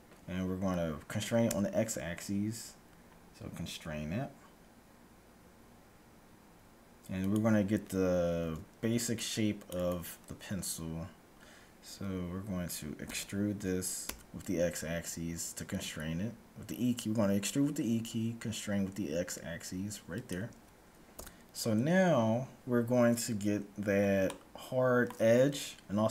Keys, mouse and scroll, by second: 8.3 a, 8.8 c, 13.0 e, 21.2 a, 24.2-26.0 middle drag, 26.0-26.1 scroll down 1.